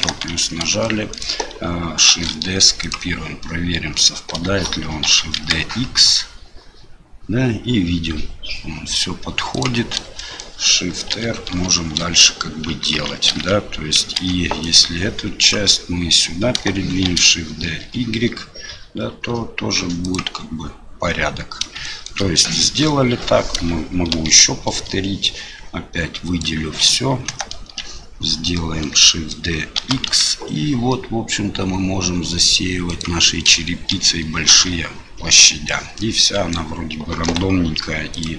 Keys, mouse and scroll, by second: 0.8 shift+middle click, 2.1 shift+d, 5.0 shift+d, 10.1 shift+middle click, 11.1 shift+r, 11.5 shift+r, 12.9 ctrl+z, 13.3 ctrl+z, 14.2 ctrl+z, 14.8 click, 17.0 shift+d, 21.8 shift+middle click, 24.1 shift+r, 25.2-26.4 drag, 27.3 ctrl+KP_Add, 29.0 shift+middle click, 29.8 shift+d, 33.9 shift+r, 34.5 shift+r, 35.8 click, 37.2 Delete.